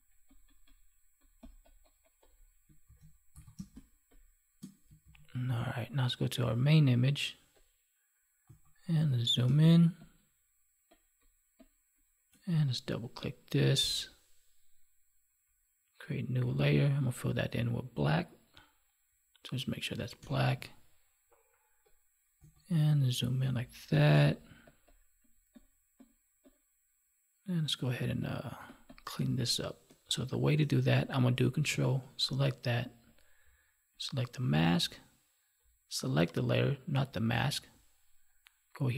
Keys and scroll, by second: 2.8 ctrl+s, 3.5 space, 5.0 ctrl+s, 9.4 space, 20.1 alt+BackSpace, 23.9 space.